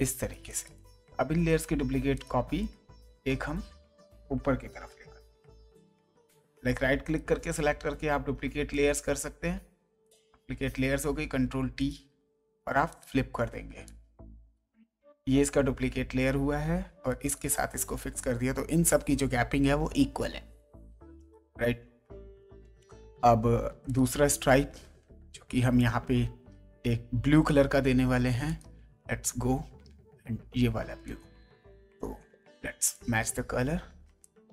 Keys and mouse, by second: 0.5 click, 2.1 click, 2.6 ctrl+click, 7.0 right click, 8.7 click, 10.0 click, 11.8 right click, 12.9 click, 17.2 click, 23.9 click, 25.7 click, 28.4 click, 31.0 click, 31.9 g, 32.9 click, 34.2 click.